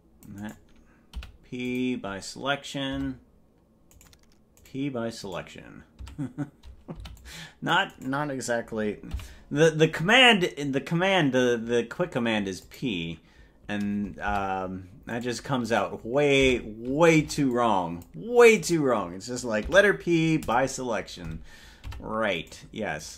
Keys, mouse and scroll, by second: 1.2 p, 3.2 Tab, 4.2 right click, 4.8 right click, 5.6 right click, 6.2 Tab, 7.0 c, 9.2 p, 14.4 Tab, 15.4 right click, 16.0 right click, 16.6 Tab, 17.2 c, 19.8 p, 22.0 Tab, 22.6 right click.